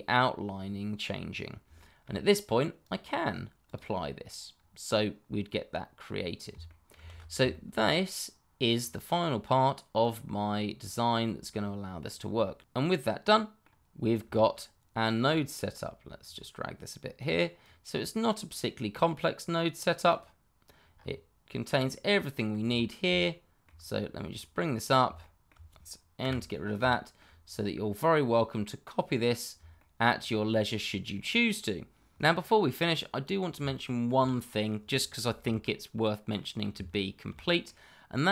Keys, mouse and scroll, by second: 0.5-1.0 scroll down 1, 1.7 shift+middle click, 1.8 middle click, 1.9 shift+middle click, 2.8 click, 4.5-5.0 scroll down 1, 5.0 middle click, 6.6 ctrl+middle click, 6.9 ctrl+z, 7.5 shift+middle click, 8.7 click, 11.1 click, 12.6-13.0 scroll down 1, 13.2 middle click, 14.0-14.3 scroll down 1, 14.3 shift+middle click, 16.2 click, 20.9-21.7 scroll up 1, 21.8 shift+middle click, 22.6-23.2 shift+scroll up 1, 23.2 shift+middle click, 24.2 click, 25.1 shift+middle click, 25.2 middle click, 25.3 shift+middle click, 26.2 n, 26.9 shift+middle click, 27.4-28.9 scroll down 1, 28.9-29.5 scroll up 1, 29.7 shift+middle click, 32.2 click, 33.7 shift+middle click, 34.6-35.6 scroll down 1, 35.6 middle click, 36.9 shift+middle click, 37.6 middle click.